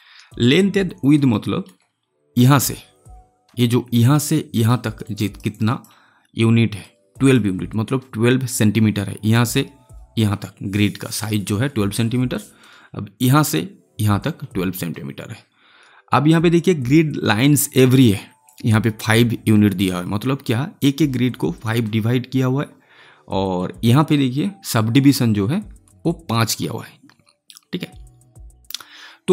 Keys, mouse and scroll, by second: 1.2-4.3 alt+middle drag, 4.5 alt+middle click, 5.1 alt+right click, 5.9-9.6 alt+drag, 18.4 click, 26.0 click.